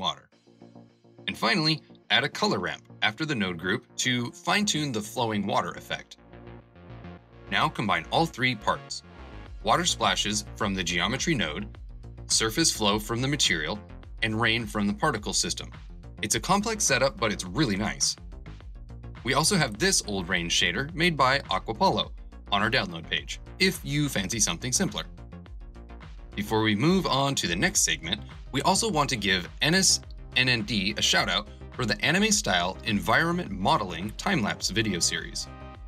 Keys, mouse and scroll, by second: 9.5 space, 10.6 space, 11.9 space.